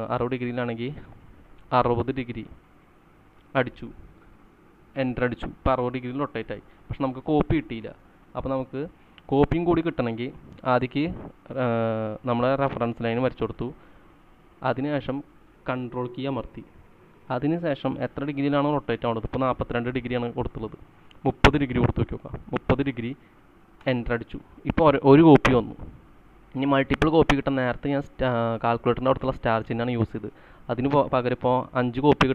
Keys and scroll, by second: 1.8 6, 3.4 0, 5.1 Return, 8.1 ctrl+z, 22.2-22.6 typing, 23.9 Return.